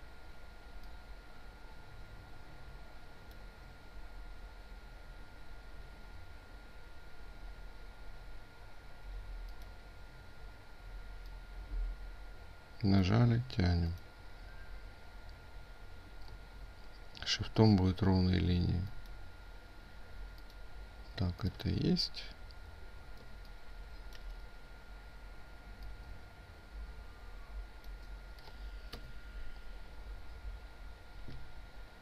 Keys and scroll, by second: 23.1 ctrl+space.